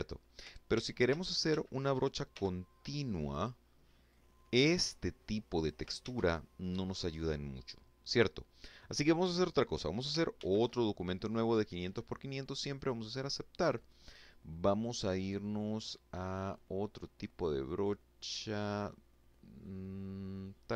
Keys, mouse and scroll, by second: 0.9 ctrl+f, 1.9 click, 2.7-4.4 drag, 4.6 ctrl+z, 7.1 click, 9.0 ctrl+n, 11.4 click, 16.1-16.4 scroll up 2.